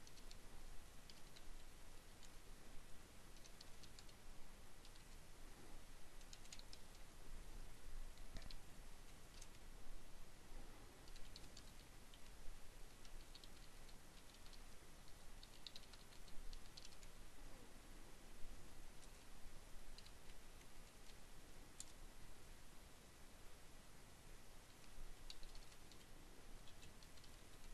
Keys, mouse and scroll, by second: 0.0-1.0 typing, 2.2-3.3 typing, 4.5-5.6 typing, 6.8-8.7 typing, 9.9-16.0 typing, 18.1 shift+,, 20.3 Return, 23.0-27.3 typing.